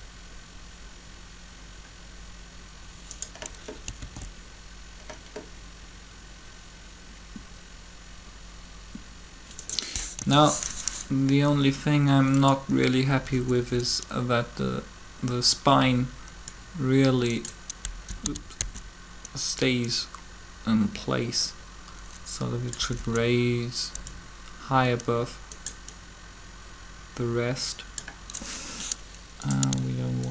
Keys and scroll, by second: 3.9 alt+a, 10.0 3, 13.1 Up, 13.3 Up, 13.5 Up, 17.7 Down, 18.2 Down, 18.6 Up, 22.8 Up, 22.8 Up.